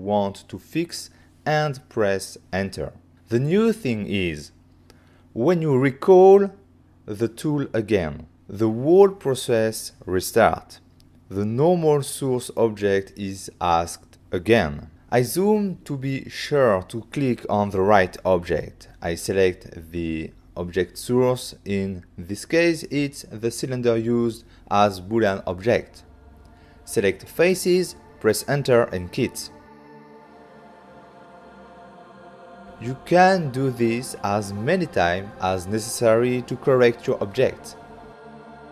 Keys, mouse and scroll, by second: 0.3 click, 1.2 click, 1.8 right click, 2.1 middle click, 2.7 c, 2.9 click, 3.7 click, 4.2 click, 4.3 click, 4.5 right click, 5.4 Return, 6.8 right click, 7.3 middle click, 8.6 middle click, 9.6 middle click, 10.0 shift+middle click, 10.2 middle click, 10.6 ctrl+middle click, 11.6 f, 12.4 click, 14.4 click, 14.6 click, 18.1 shift+middle click, 20.8 ctrl+middle click, 25.8 click, 26.4 ctrl+middle click, 26.8 middle click, 27.2 middle click, 27.8-28.3 scroll up 2, 28.0 click, 28.5 scroll up 2, 28.8 click, 29.1 middle click, 29.6 middle click, 30.3 click, 30.9 middle click, 32.3 middle click, 32.6 click, 33.2 right click, 33.4 middle click, 34.0 Return, 34.4 right click, 34.7 ctrl+middle click, 35.8 middle click, 36.3 f, 36.6 click, 37.3 click, 38.0 ctrl+middle click.